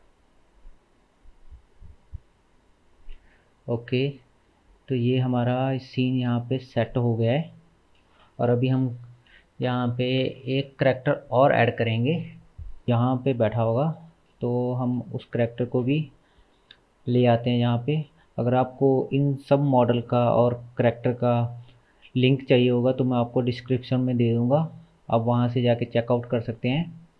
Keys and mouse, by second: 6.2 space, 7.4 ctrl+s.